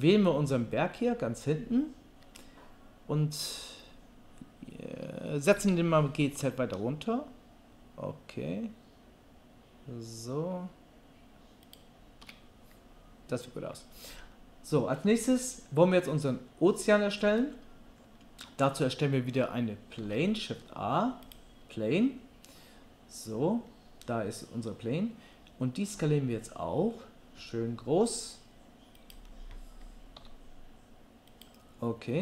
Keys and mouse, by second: 5.5 g, 20.0 shift+a, 25.9 s, 30.2 s.